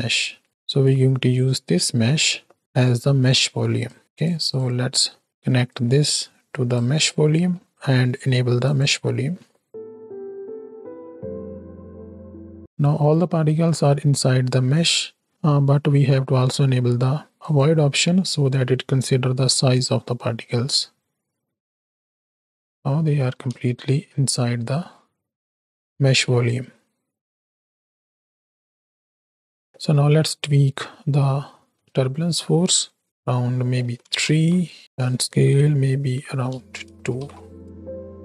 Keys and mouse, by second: 0.2 middle click, 1.0-4.1 drag, 4.4 click, 5.0 middle click, 5.7-6.8 drag, 7.0 middle click, 8.7 click, 9.7 shift+Right, 9.7 shift+Left, 10.5 space, 11.9 z, 13.4 middle click, 14.9-15.3 middle drag, 17.4 click, 22.3 z, 23.0 middle click, 23.6 space, 24.5 middle click, 29.7 space, 29.7 click, 31.4 click, 32.1 shift+click, 32.7 middle click, 33.0-34.1 drag, 34.8-36.7 drag, 37.2 shift+Right, 37.5 shift+Left, 37.7 space.